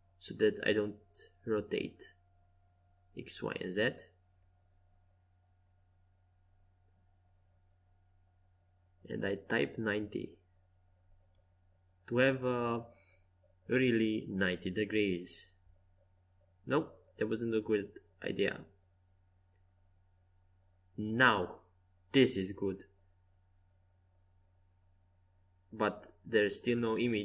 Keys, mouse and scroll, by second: 3.9 middle click, 7.7 r, 11.3-13.3 middle drag, 14.1 KP_5, 14.5 KP_1, 17.2 Escape, 18.5 KP_5, 19.5 r, 22.6 KP_5, 23.9 KP_1, 24.3 KP_3, 25.3 KP_1, 26.9 KP_2.